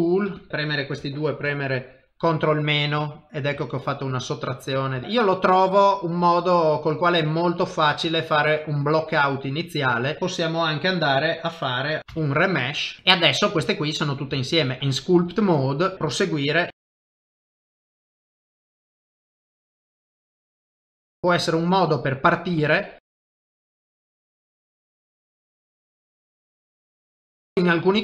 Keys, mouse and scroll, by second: 0.4 shift+click, 0.5 shift+click, 1.6 ctrl+KP_Subtract, 2.5 middle click, 3.7 ctrl+middle click, 4.1 middle click, 5.0 click, 5.0 shift+middle click, 5.5 middle click, 8.0 shift+middle click, 8.4 middle click, 10.0 click, 10.2 shift+click, 10.2 middle click, 12.0 ctrl+shift+v, 13.0 shift+middle click, 13.1 middle click, 13.6 shift+middle click, 14.5 ctrl+Tab, 15.3 shift+click, 15.9 middle click, 16.1 shift+click, 16.6 shift+click, 16.7 middle click, 17.3 ctrl+z, 17.7 ctrl+z, 17.9 ctrl+z, 18.7 click, 19.0 shift+click, 20.2 shift+click, 20.2 middle click, 20.5 shift+click, 21.3 shift+click, 22.0 middle click, 22.6 shift+click, 23.4 f, 23.6 middle click, 23.6 f, 23.8 shift+click, 24.2 middle click, 24.3 ctrl+middle click, 24.5 click, 24.7 shift+click, 24.9 middle click, 25.3 click, 25.3 g, 25.5 click, 25.7 middle click, 26.0 click, 26.7 click, 27.0 click, 27.0 middle click, 27.2 ctrl+middle click, 27.5 middle click.